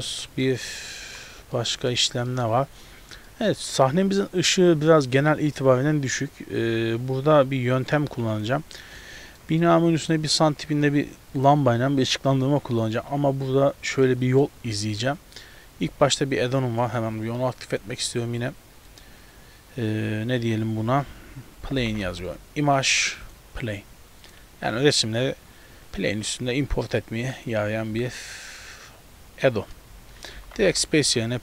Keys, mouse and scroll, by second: 0.6 middle click, 1.0 z, 1.6 middle click, 2.4 shift+middle click, 2.8-3.3 scroll down 3, 3.3 shift+middle click, 3.8 middle click, 5.6-6.0 scroll down 2, 8.0 click, 9.0 shift+middle click, 9.7 middle click, 14.1 middle click, 14.8 shift+middle click, 16.9 click, 30.0 space.